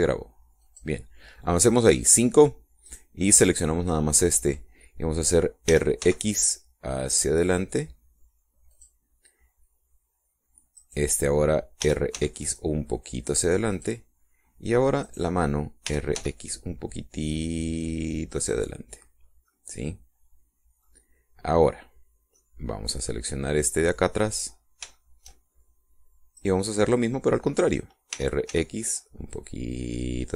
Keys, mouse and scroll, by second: 1.5 click, 3.8 right click, 6.6 r, 6.9 x, 9.7 click, 11.7 right click, 12.7 r, 13.1 x, 14.7 click, 16.0 right click, 16.8 r, 17.1 x, 19.3 click, 20.4-21.9 middle drag, 23.3-25.4 middle drag, 25.9 shift+middle click, 27.3 right click, 29.1 r, 29.5 x.